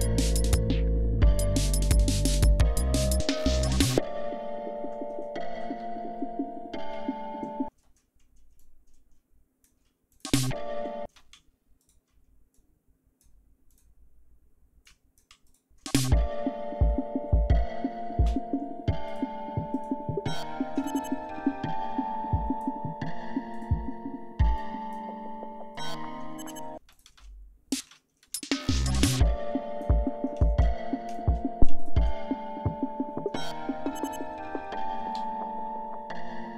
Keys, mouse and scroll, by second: 0.8-1.2 scroll down 2, 1.8-2.3 scroll up 2, 2.7-3.6 scroll down 4, 4.9-5.8 scroll up 4, 6.0-6.9 ctrl+scroll up 4, 7.7 space, 8.6-9.9 drag, 10.1 alt+click, 10.4 alt+space, 11.1 space, 11.8 shift+right click, 12.5 shift+click, 13.7 click, 14.9 click, 15.5 shift+right click, 15.9 shift+space, 16.5 ctrl+shift+scroll down 3, 17.4 ctrl+scroll down 2, 19.1 shift+right click, 19.7 shift+right click, 20.9-22.8 shift+drag, 23.5 shift+right click, 24.6 click, 25.8 shift+right click, 26.8 space, 26.9 click, 27.9 space, 29.1 click, 31.1 shift+click, 31.8 shift+right click, 34.1 ctrl+scroll down 2, 35.2 d.